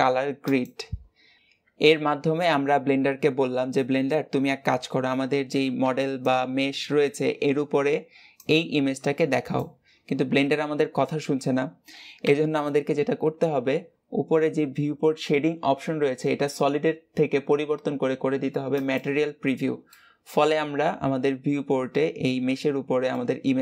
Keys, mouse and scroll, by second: 1.4-13.7 shift+middle drag, 18.7 click, 19.7-22.8 middle drag.